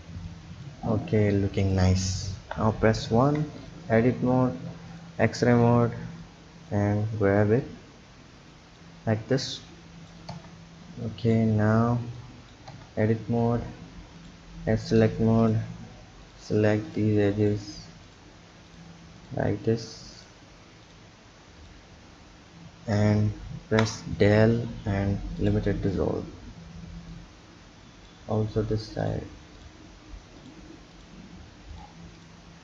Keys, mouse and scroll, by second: 0.9 click, 1.6 click, 2.4 KP_1, 3.2 Tab, 3.6 click, 4.9-5.9 drag, 5.9 b, 7.6 click, 9.6 click, 10.3 Tab, 11.2-12.2 drag, 12.7 Tab, 14.2 click, 15.4 click, 16.2 shift+click, 16.9 shift+click, 17.4 shift+click, 18.0 shift+click, 18.7 shift+click, 19.2 shift+click, 20.2 shift+click, 20.8 shift+click, 21.6 shift+click, 23.6 Delete, 27.1 click, 29.0 click, 29.6 shift+click, 30.4 shift+click, 30.9 shift+click, 31.7 shift+click, 32.2 shift+click.